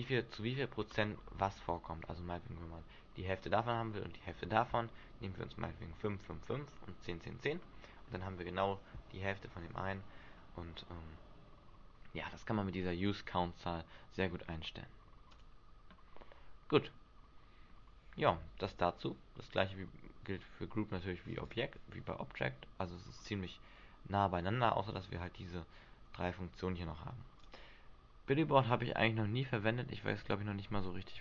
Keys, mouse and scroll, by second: 1.1 click, 15.5 click, 21.6 click, 23.4 click, 27.6 click, 29.9 middle click.